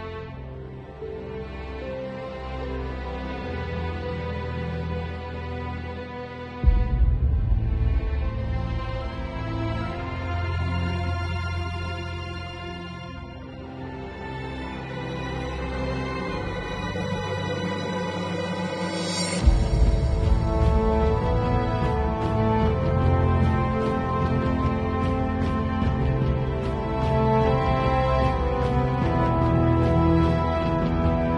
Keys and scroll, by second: 7.9 0, 16.1 [, 19.0 x, 20.7 x, 22.1 v, 25.1 super+l, 29.3 Return, 30.3 space.